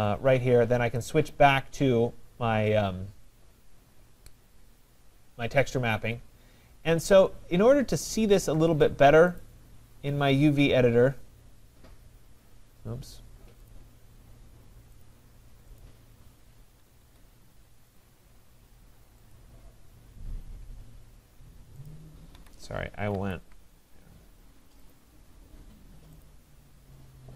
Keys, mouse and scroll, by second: 1.2 click, 4.2-6.2 drag, 9.4-13.2 drag, 13.8 click, 15.0 click, 15.8 click, 17.0 Escape, 18.0 click, 19.3 click, 22.0 click, 22.4 Escape, 23.2 ctrl+z, 24.9 click, 26.2 click.